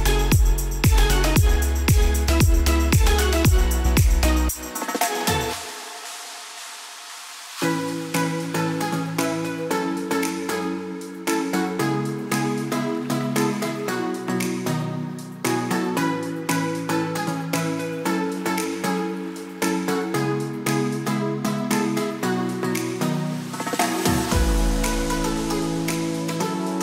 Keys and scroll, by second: 7.7 Return, 8.1 s, 11.7 b, 19.0 Return, 19.5 s, 25.7 b.